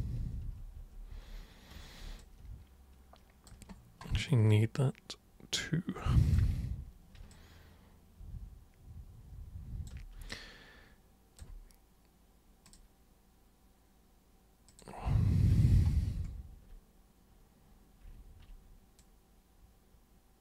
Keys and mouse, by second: 0.2 ctrl+super+z, 0.4 ctrl+super+z, 0.8 ctrl+super+z, 1.1 ctrl+super+z, 2.2-3.5 alt+super+drag, 4.5-6.4 alt+super+drag, 7.3-9.9 alt+super+drag, 10.3-11.4 alt+super+drag, 12.7 super+click, 14.7 super+click, 19.0-20.4 super+drag.